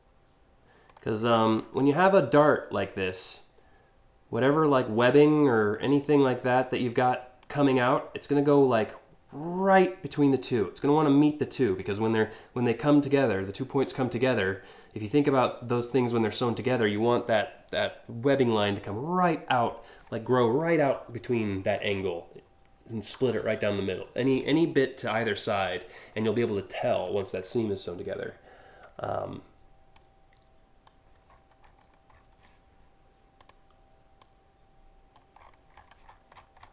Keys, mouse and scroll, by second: 0.8-1.3 scroll down 4, 5.7-7.0 drag, 27.0 scroll up 1, 27.9-28.4 alt+scroll up 2, 29.6 click, 30.9 scroll down 4, 31.3 alt+scroll up 4, 31.8 alt+scroll down 1, 33.0 click, 33.8 click, 35.0 scroll down 1, 35.4-36.7 scroll up 12.